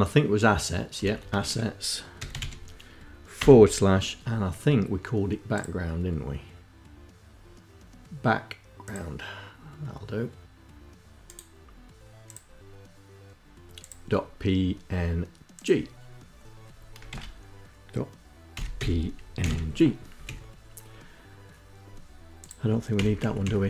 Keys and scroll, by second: 0.5-3.1 typing, 16.7 shift+Insert, 18.0-19.7 typing, 19.8 Down, 19.9 Up, 22.9 Down, 23.2 Up.